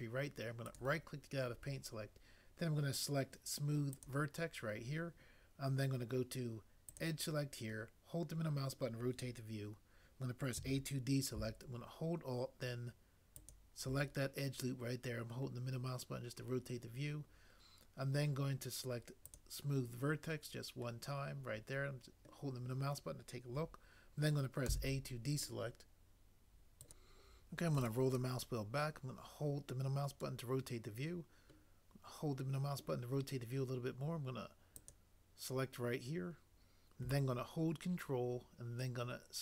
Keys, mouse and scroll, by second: 10.5 a, 24.7 a.